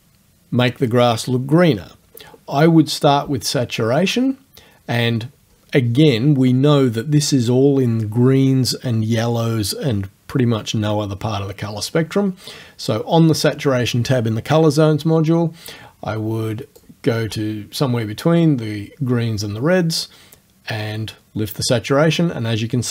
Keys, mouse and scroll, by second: 16.8-22.9 drag.